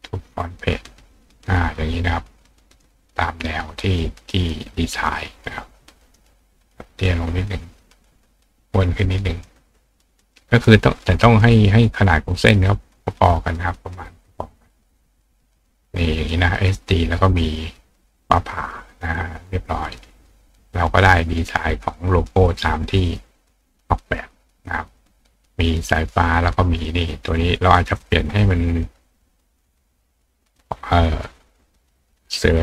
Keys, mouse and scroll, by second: 0.5 click, 1.4 click, 3.0 click, 5.9 click, 7.9 click, 11.4 click, 12.5 click, 13.7 click, 15.2 click, 15.7 click, 19.0 click, 19.6 click, 21.1 click, 24.9 click, 27.1-28.0 drag, 29.1-30.6 drag, 31.7 click.